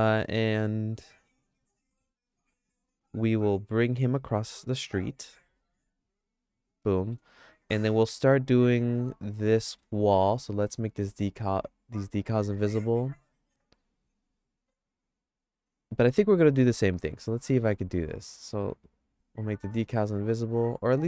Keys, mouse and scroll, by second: 1.7 click, 2.3 click, 3.9 g, 5.3 g, 7.0 middle click, 7.4-9.8 shift+middle drag, 20.0 click, 20.5 click.